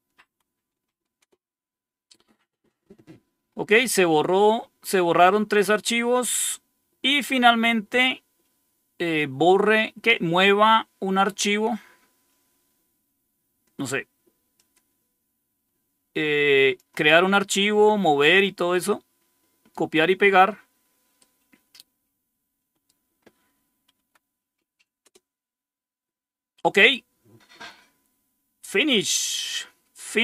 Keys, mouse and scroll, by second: 0.1 Tab, 1.1 Return, 14.4-16.7 drag, 18.6-19.6 right drag, 21.1 right click, 23.8 Right, 24.9 Return, 29.1-29.5 scroll down 2.